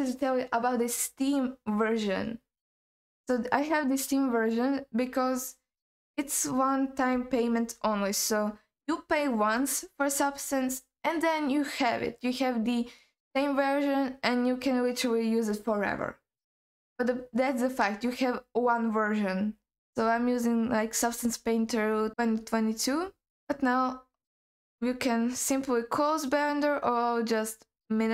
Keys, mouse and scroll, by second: 20.2-20.8 scroll up 2, 20.8-21.9 scroll down 3, 21.9 scroll up 2, 22.1-23.3 scroll down 1, 23.3-26.1 scroll down 1.